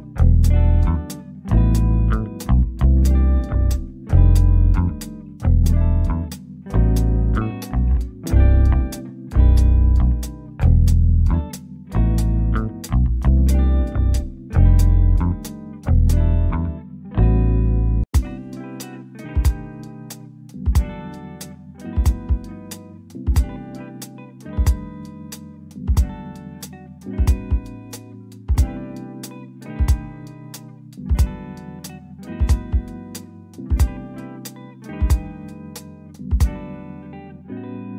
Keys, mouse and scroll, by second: 3.0 Escape, 3.4 click, 4.6-5.7 scroll down 1, 5.7 middle click, 6.8 shift+click, 7.2-7.5 scroll up 1, 8.1 click, 9.3 typing, 10.4 Return, 12.1 shift+click, 14.2-14.6 scroll down 1, 15.4 middle click, 15.7-16.2 scroll up 1, 16.5 shift+click, 17.5-18.9 scroll up 1, 19.1 click, 20.3 1, 21.4 Return, 22.4-22.7 scroll down 1, 22.7 click, 24.5-25.3 scroll up 1, 26.1 shift+click, 30.1 scroll down 1, 30.4 click, 32.2-32.6 scroll up 1, 33.7 shift+click, 36.4 click.